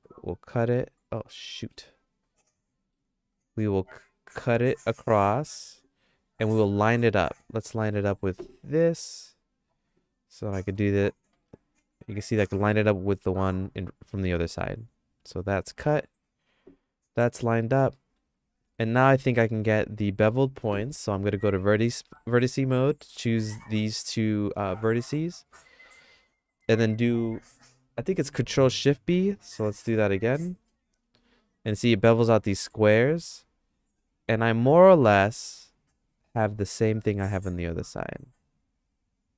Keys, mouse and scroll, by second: 1.6 middle click, 1.9-2.9 shift+middle drag, 4.6 ctrl+r, 7.4 KP_3, 9.0 middle click, 10.7 g, 17.9 middle click, 18.7 middle click, 19.1-20.4 shift+middle drag, 20.9 1, 25.4 KP_3, 29.2 middle click, 30.6 ctrl+shift+b.